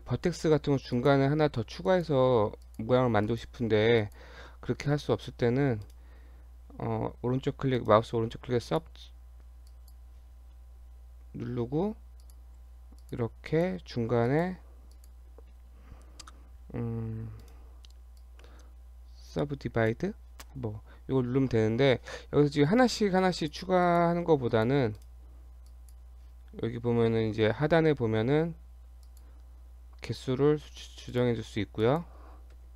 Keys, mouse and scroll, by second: 1.0 click, 1.9 click, 2.7 click, 3.3 click, 4.0 shift+click, 4.2 shift+click, 5.8 right click, 7.8 right click, 9.7 click, 11.4 g, 12.6 g, 13.5 click, 14.3 shift+click, 15.0 click, 17.5 right click, 23.4 click, 23.9 click, 24.5 shift+click, 25.0 right click, 29.1 click, 30.1 click.